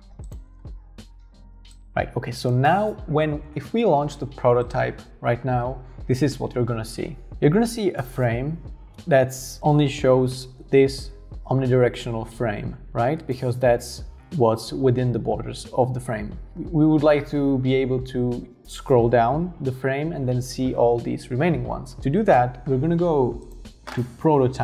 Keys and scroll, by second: 0.0 super+x, 0.0 k, 0.5 super+v.